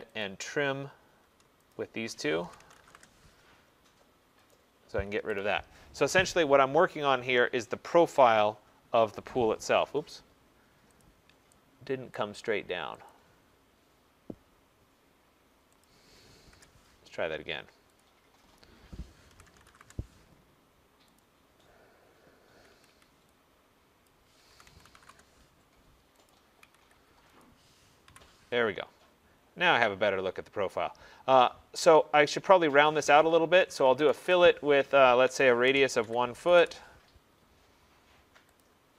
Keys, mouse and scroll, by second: 0.3 click, 1.8 shift+click, 2.5-3.7 typing, 4.6 click, 5.2 Escape, 5.4 Escape, 6.3 middle click, 7.2 middle click, 9.2 middle click, 9.5 middle click, 11.1 click, 12.2 right click, 13.1 click, 15.9 click, 16.6 Return, 17.4 middle click, 17.5 middle click, 18.1 click, 18.1 middle click, 19.4-20.0 typing, 19.9 Return, 21.3 click, 22.8 Escape, 23.0 Escape, 24.1 click, 24.3-25.1 typing, 26.4 click, 26.7 Escape, 26.9 Escape, 27.5 click, 28.2 Delete, 29.2-30.9 scroll, 30.9 scroll, 31.1 middle click, 33.7-36.6 typing, 38.7 click.